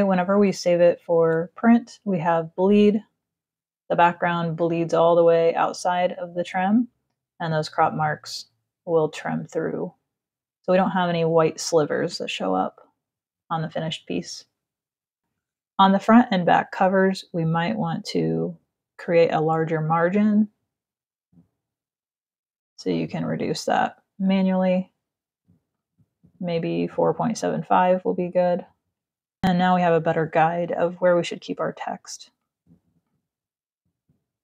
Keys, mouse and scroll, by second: 21.8 click, 25.5 click, 26.6 click, 27.3 click, 28.2 click, 31.9 click, 32.6 click.